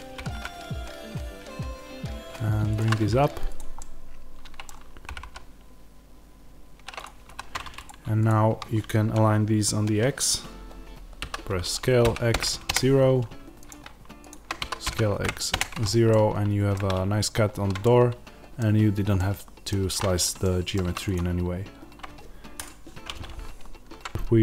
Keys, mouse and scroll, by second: 0.1 g, 2.7 click, 3.7-6.9 middle drag, 5.0 g, 6.9 click, 7.2 1, 7.8 click, 11.2 s, 12.6 KP_Enter, 13.6 click, 14.5 s, 15.5 KP_Enter, 16.0-20.9 middle drag, 16.6 scroll down 1, 19.8-20.3 scroll up 1, 20.7 3, 20.9-24.4 drag.